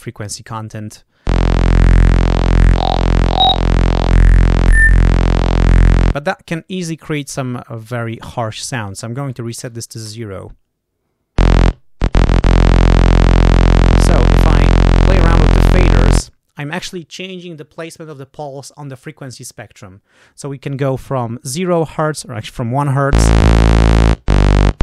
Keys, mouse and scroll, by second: 1.4-6.2 drag, 8.0 click, 9.6 0, 10.0 Return, 12.4-13.6 drag, 13.8 click, 14.7 click, 15.4 click, 21.1 click, 23.3-24.3 drag, 24.5-24.8 drag.